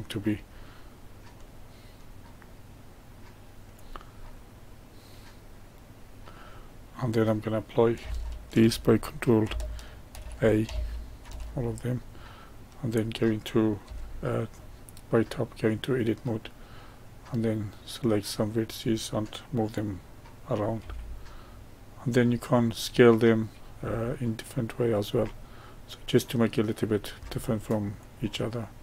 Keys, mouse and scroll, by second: 1.2-4.1 drag, 4.1-7.1 middle drag, 8.5 ctrl+a, 10.1 ctrl+a, 11.2 ctrl+a, 11.7-13.8 middle drag, 13.8 Tab, 14.5-17.5 middle drag, 18.4 click, 20.7 g, 22.2-23.3 middle drag, 23.3 click, 23.7 g, 25.3-26.6 middle drag, 26.6 click, 27.1 g.